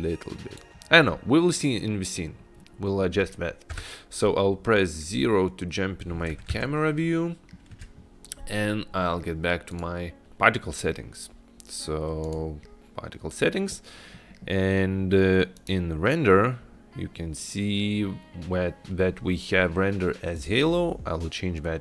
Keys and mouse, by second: 2.9 middle click, 3.8 KP_0, 6.8-7.6 shift+middle drag, 9.8 click, 15.7 click, 20.4-21.8 drag.